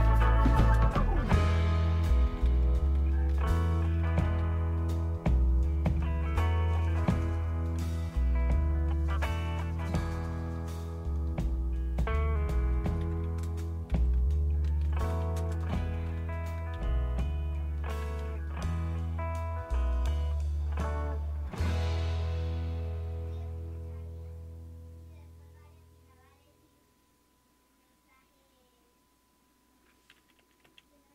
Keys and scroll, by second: 0.0-4.9 typing, 7.8 Return, 12.9 typing, 13.9-17.3 typing, 18.0 Return, 29.4 Return, 29.4 typing, 30.4 Up, 30.7 Up.